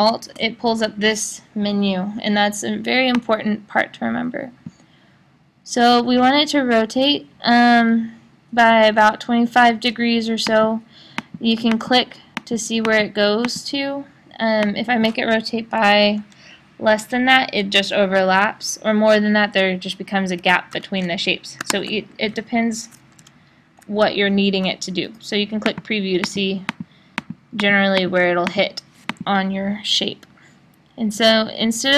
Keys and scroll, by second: 20.7 5, 21.7 1, 22.3 \, 23.1 BackSpace.